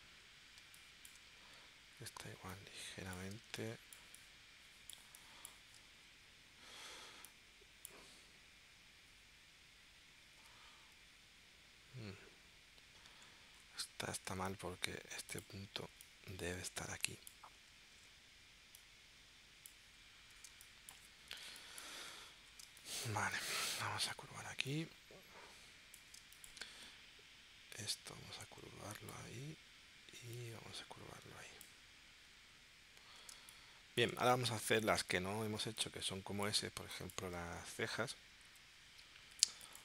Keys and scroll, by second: 0.6 space, 3.4 space, 10.4 super+z, 14.2 a, 17.9 shift+c, 20.5 space, 21.5 space, 22.6 space, 26.2 space, 33.3 space, 34.3 space, 35.6 space, 38.5 p, 39.4 space.